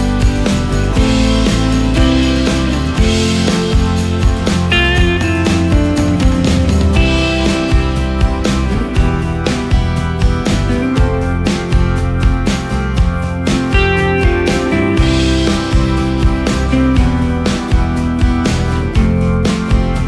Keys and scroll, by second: 14.9 ctrl+space, 17.0 ctrl+space, 17.8 ctrl+space, 19.0 ctrl+space.